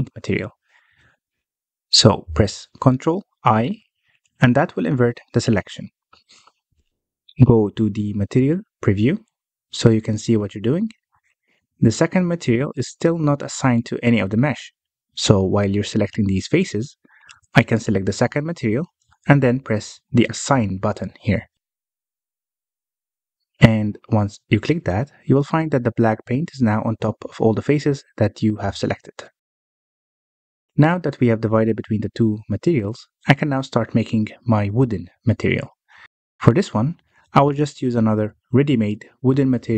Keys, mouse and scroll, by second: 3.6 ctrl+i, 5.9-8.9 scroll down 1, 9.7 click, 10.2 z, 11.4-13.8 scroll up 1, 13.8 click, 14.3-14.7 scroll down 1, 14.7-15.9 middle drag, 15.9-16.4 scroll up 3, 16.4-19.1 shift+middle drag, 19.1 click, 22.1 click, 22.9-25.2 middle drag, 25.2-25.7 scroll down 1, 25.7-27.8 middle drag, 27.8 Tab, 28.3 alt+a, 30.3 alt+h, 30.9 alt+a, 32.2 scroll down 1, 32.5-33.7 middle drag, 33.7 scroll up 1, 34.0 shift+middle click, 34.3-36.3 scroll up 1, 36.3-38.2 drag, 38.6-39.7 drag.